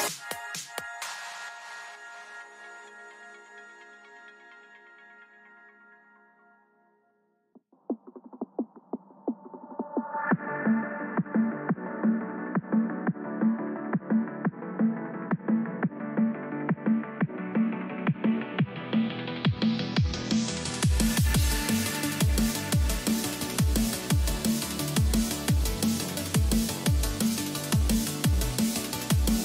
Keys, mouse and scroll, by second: 4.0 a, 4.4-6.6 middle drag, 8.5-9.5 middle drag, 11.4-13.7 right drag, 11.9-13.4 drag, 15.4 a, 15.9-17.8 middle drag, 19.2-25.8 middle drag, 29.2-29.4 middle drag.